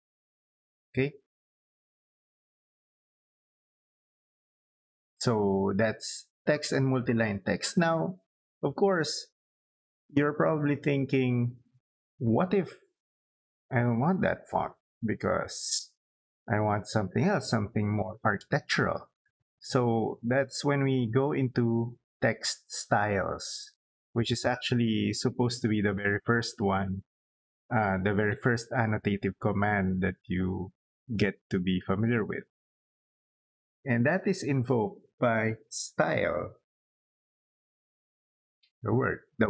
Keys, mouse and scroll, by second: 0.1 click, 0.9 middle click, 1.8 scroll down 2, 2.3 middle click, 2.7 scroll up 2, 3.3 middle click, 3.9 scroll up 2, 4.2-5.6 middle drag, 36.5 s, 37.4 y.